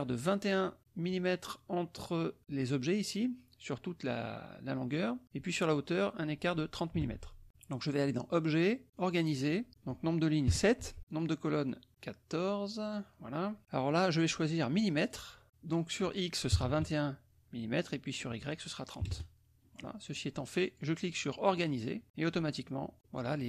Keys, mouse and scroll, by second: 7.0 alt+Tab, 8.0 click, 8.9-10.1 drag, 10.4 KP_7, 10.8 Tab, 11.0 click, 11.6 click, 12.8 click, 13.8-15.3 drag, 15.4 click, 16.6 KP_1, 17.8 click, 19.0 KP_0, 20.2 click, 21.5 click, 22.9 click.